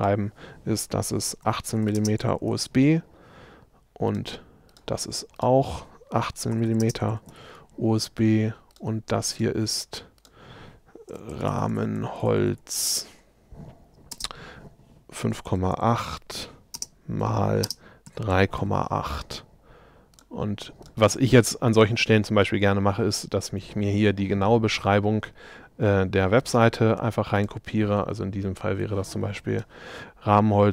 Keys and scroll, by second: 1.4 i, 6.0-6.8 typing, 14.3 space.